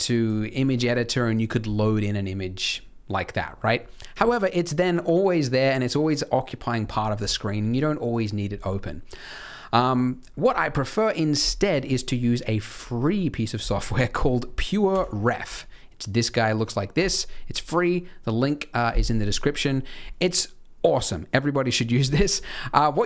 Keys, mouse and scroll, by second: 10.1 click.